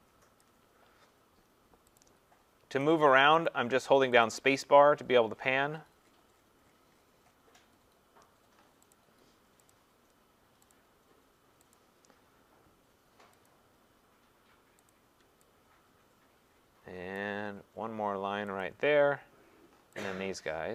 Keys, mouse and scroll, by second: 0.1 scroll, 0.3 click, 0.4 click, 2.0 click, 3.0 click, 3.5 click, 4.3 click, 4.6-7.7 scroll, 9.0 click, 9.7 click, 10.7 click, 11.8 click, 15.7-16.6 scroll, 17.1 click, 18.6 click, 20.1 click.